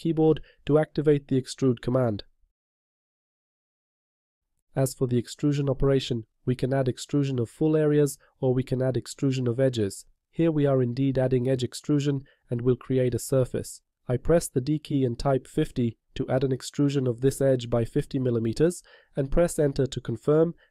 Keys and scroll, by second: 3.3 e, 16.4 0.